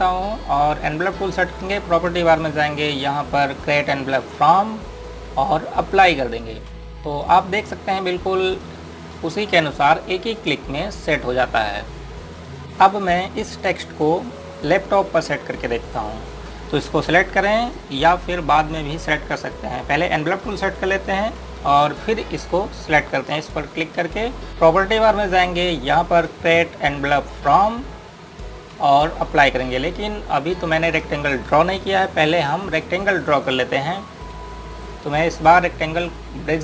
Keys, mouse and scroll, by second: 10.3 click, 12.6 scroll down 1, 14.3 click, 18.5 click, 28.3 click, 33.2 click.